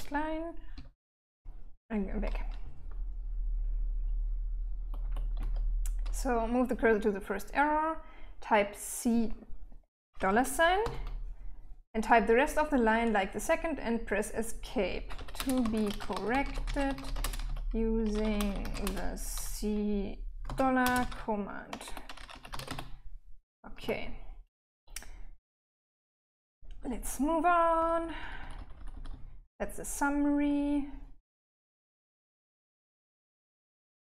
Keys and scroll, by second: 0.1 k, 0.6 k, 2.0 h, 2.5-4.4 h, 4.8 l, 9.6 c, 10.2 shift+4, 14.2-18.7 typing, 19.9-23.2 typing, 25.5-26.4 typing, 28.2 typing.